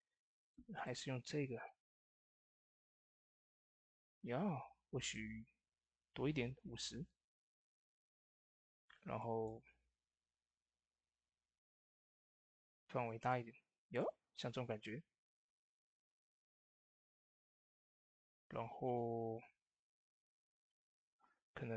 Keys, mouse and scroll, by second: 0.3-7.0 drag, 7.9 click, 7.9 click, 13.1 click, 13.1-16.2 drag, 18.9 click, 19.1 ctrl+s.